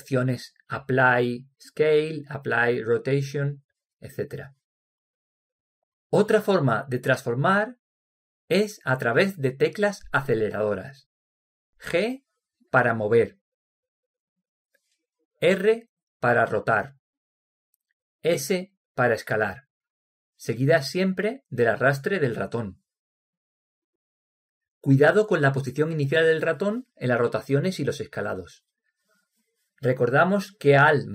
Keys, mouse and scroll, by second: 1.2-3.0 drag, 13.7 g, 16.8 r, 19.5 s.